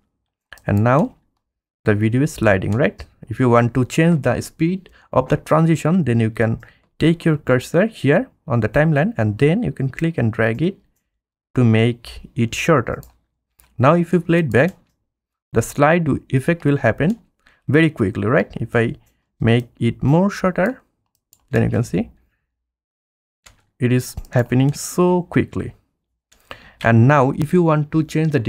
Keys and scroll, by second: 0.9 space, 7.4 F1, 13.8 F1, 14.7 space, 21.6 space.